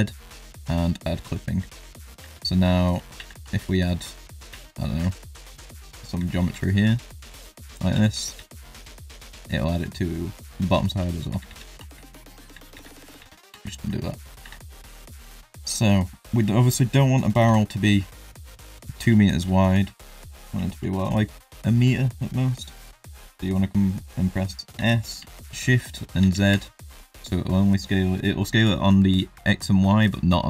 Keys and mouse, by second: 0.5 click, 1.5 shift+middle drag, 2.2 Tab, 3.1 ctrl+r, 4.5 3, 5.1 alt+click, 6.4 alt+e, 7.9 Tab, 8.1 middle drag, 8.3 z, 8.7 shift+middle drag, 9.2 middle drag, 10.6 middle drag, 11.3 ctrl+z, 11.5 ctrl+z, 12.0 shift+middle click, 12.4 ctrl+z, 12.7 ctrl+z, 13.2 ctrl+z, 13.7 shift+middle click, 14.4 Tab, 15.0 middle drag, 15.5 shift+middle drag, 15.9 middle drag, 16.6 click, 17.4 KP_7, 19.9 shift+drag, 20.6 shift+drag, 24.7 s.